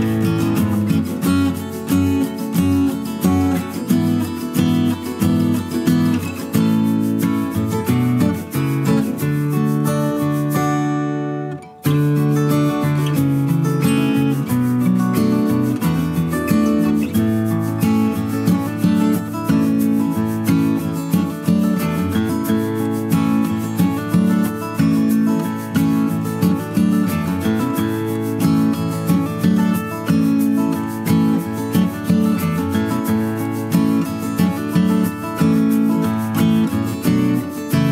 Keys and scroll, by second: 3.5 Down, 4.6 ctrl+c, 4.7 ctrl+v, 7.5 Up, 7.7 Left, 8.9 Up, 18.1 ctrl+c, 18.2 ctrl+v, 23.1 Down, 24.7 Down, 35.2 space.